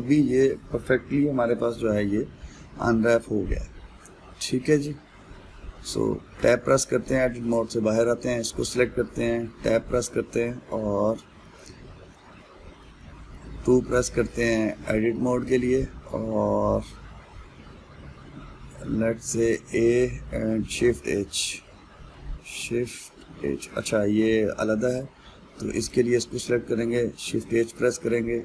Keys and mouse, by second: 7.0 Tab, 7.7-8.6 middle drag, 8.6 click, 9.3 middle click, 9.9 Tab, 11.1-16.1 middle drag, 16.1 click, 16.4-19.5 middle drag, 20.0 a, 22.3-24.9 middle drag, 24.9 Tab, 25.6 click, 26.5 click, 27.5 shift+h.